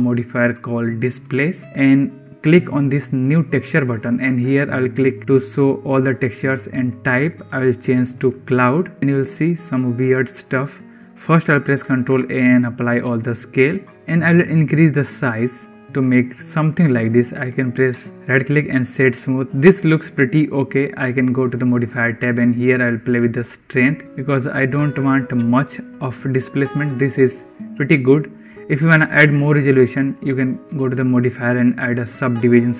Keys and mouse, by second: 3.1 click, 5.4 click, 7.5-8.1 drag, 9.0-10.3 middle drag, 11.7 ctrl+a, 13.5-13.9 middle drag, 14.3-15.3 drag, 15.5 click, 15.5-16.6 middle drag, 17.2 right click, 18.8 middle click, 22.6-24.6 drag, 24.9 middle click, 25.6-26.7 shift+middle drag, 27.2 shift+middle click, 30.6-32.7 drag.